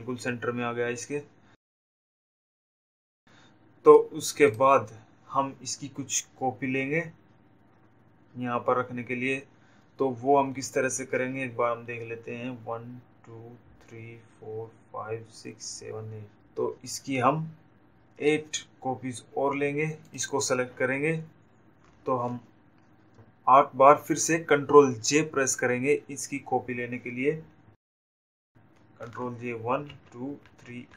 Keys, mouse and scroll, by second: 2.8 click, 22.4 click.